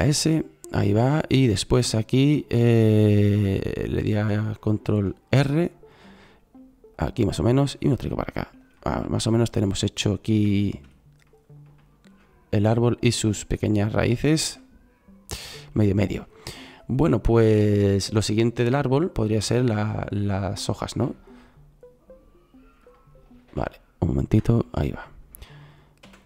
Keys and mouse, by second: 5.3 ctrl+r, 26.0 shift+a.